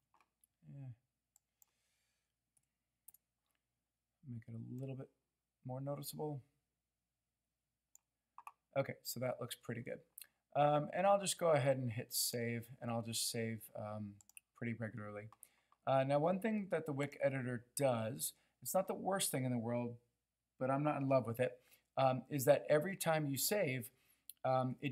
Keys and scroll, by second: 2.6 3, 3.1 Return.